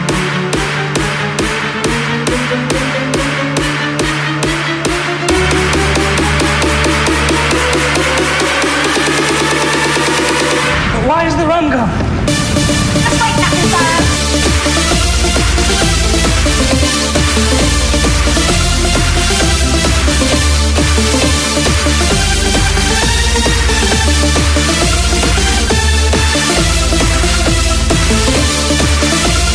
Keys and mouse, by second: 3.9 KP_6, 6.6 Tab, 17.9-22.5 drag, 21.9-26.5 right drag, 24.5 x, 29.2 KP_Subtract.